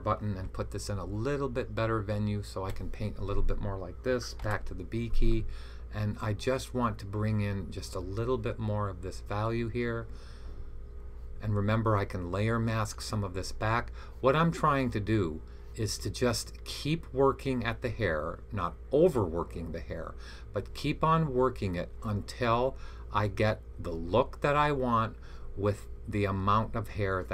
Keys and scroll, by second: 0.3-2.6 typing, 4.3-7.3 typing.